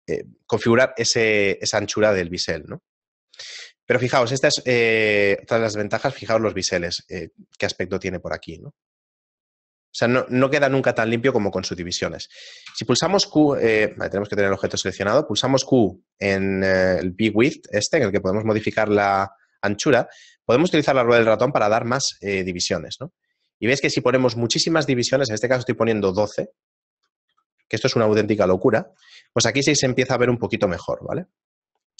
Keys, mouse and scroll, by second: 4.1 shift+middle click, 5.1 a, 5.5-6.8 scroll up 2, 10.2-10.7 scroll down 2, 10.9-11.9 scroll down 1, 11.9-12.6 scroll up 1, 12.7 q, 13.9 right click, 14.7 q, 27.3 z, 29.3 shift+middle click, 29.3 z, 29.6 shift+middle click, 31.5-31.9 scroll down 2.